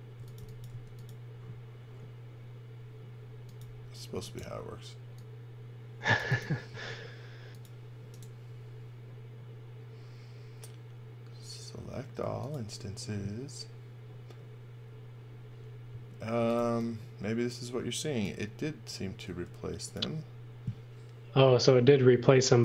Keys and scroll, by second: 0.0-0.9 typing, 6.7 space, 16.1-17.1 typing, 19.2 space.